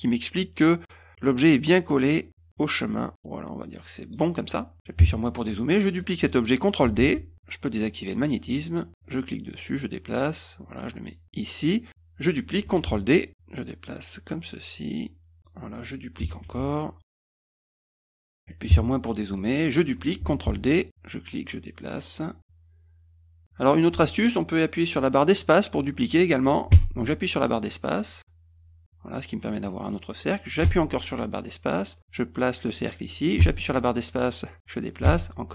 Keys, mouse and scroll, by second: 1.0 click, 5.8 middle click, 7.0 ctrl+d, 8.2 click, 9.0-12.4 drag, 12.9 ctrl+d, 13.3-15.4 drag, 16.4 ctrl+d, 17.0 click, 17.8 middle drag, 19.4 middle drag, 20.5 ctrl+d, 20.9-35.5 drag, 26.7 space, 30.6 space, 33.4 space, 35.0 space.